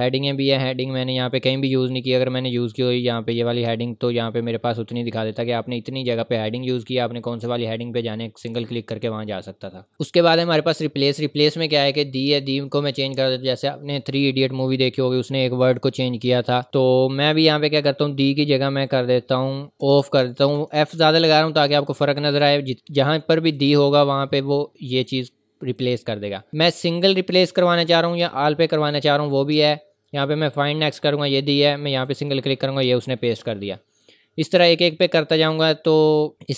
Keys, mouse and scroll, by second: 1.7 scroll down 1, 9.9 click, 19.5-20.5 typing, 23.4 click, 30.1 click.